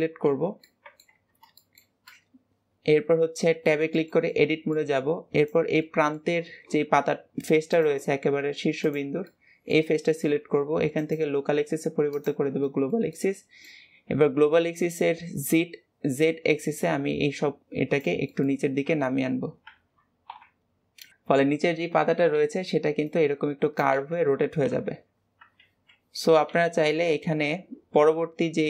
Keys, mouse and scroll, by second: 0.5 middle click, 1.1 Tab, 1.4-5.2 shift+middle drag, 5.2 click, 5.7-7.5 middle drag, 7.5-8.8 drag, 9.1-10.8 middle drag, 10.8-12.5 drag, 12.5-14.6 shift+middle drag, 14.6 click, 18.1 middle click, 18.7 KP_1, 21.1-23.8 middle drag, 24.6 KP_1, 25.4 alt+z, 26.3 Tab.